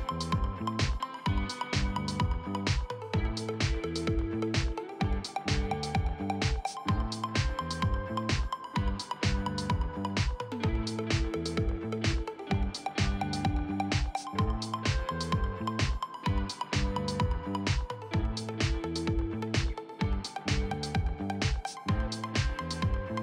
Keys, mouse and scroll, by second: 10.5-12.1 middle drag, 12.1-18.2 right drag, 18.2 f, 19.2-20.5 drag, 20.5-21.6 right drag, 22.1-23.2 shift+right drag.